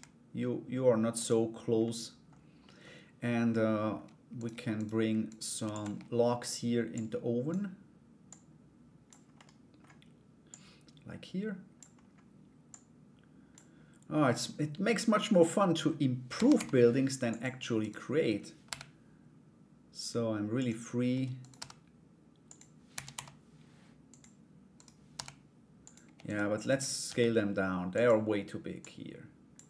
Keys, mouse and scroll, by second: 1.4 middle click, 2.2 middle click, 2.4-3.3 scroll down 1, 3.3-4.1 scroll down 1, 4.3 shift+right click, 4.9 shift+right click, 5.2 shift+d, 6.5 click, 7.8-8.8 drag, 8.9 middle click, 10.0-11.3 drag, 12.3 click, 17.4 right click, 18.2 g, 21.0 right click, 22.5 r, 24.3 right click, 24.7 g, 25.8 shift+right click, 26.2 shift+right click, 26.6 s, 28.4 click.